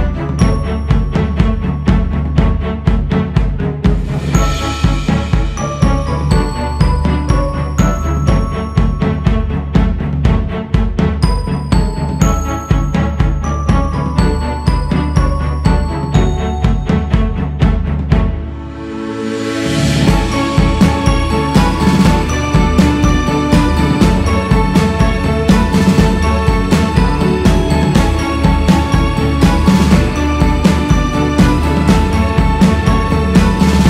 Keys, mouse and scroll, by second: 0.7-2.0 drag, 2.0 ctrl+z, 2.8 shift+c, 3.5-5.5 drag, 5.5-6.3 scroll down 3, 6.3-7.5 drag, 7.5-8.1 scroll up 1, 8.1-9.7 drag, 9.7-10.3 scroll down 2, 10.3-11.4 scroll down 3, 11.4 click, 12.1-13.3 scroll up 6, 13.3 shift+s, 13.7 f, 14.7-18.0 drag, 18.0 c, 18.3-19.3 scroll up 4, 19.6-21.0 drag, 21.0 ctrl+z, 22.4-25.8 drag, 25.8-26.7 scroll down 1, 26.7-33.8 drag.